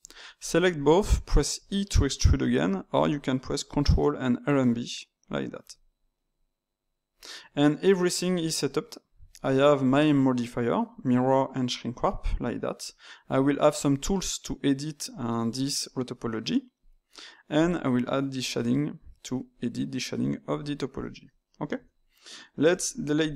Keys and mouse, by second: 0.3 shift+click, 1.5 e, 2.6-4.3 middle drag, 4.3 ctrl+right click, 5.4 ctrl+right click, 6.1-9.1 middle drag, 9.3 click, 12.3 click, 13.3 click, 16.7 click, 17.6 click, 20.4 click, 21.2 middle click, 21.7 Tab, 23.2 click.